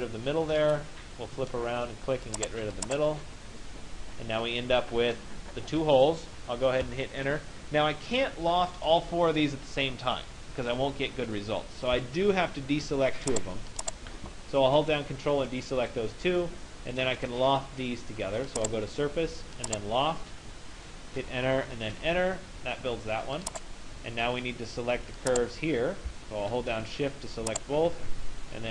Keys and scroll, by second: 6.5 Return, 20.8 Return.